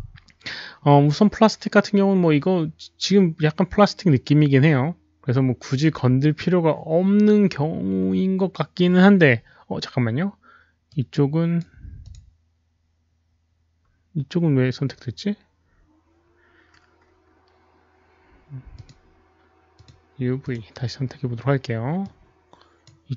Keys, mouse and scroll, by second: 2.3 click, 5.1 click, 10.8-12.0 right drag, 12.4 click, 18.7 click, 19.7 click, 20.4 click, 22.0 click.